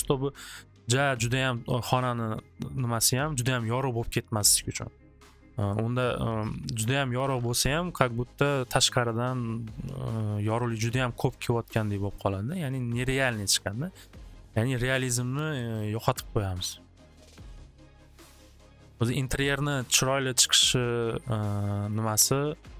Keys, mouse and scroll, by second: 0.0-0.1 typing, 10.7 click, 11.5-16.4 drag, 17.7 click, 18.3 click, 21.5 click, 22.0 click, 22.5 click.